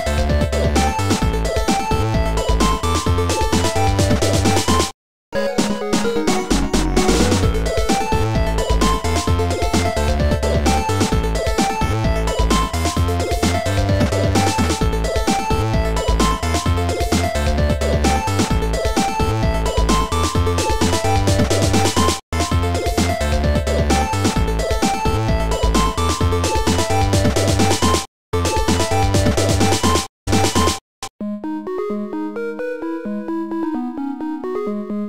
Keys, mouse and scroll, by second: 2.3 click, 8.3 click, 9.5 click, 14.0 shift+click, 16.6 shift+click, 23.1 click, 28.0 click, 28.5 click, 29.8 click, 30.5 shift+click, 32.3 shift+click, 34.4 shift+click.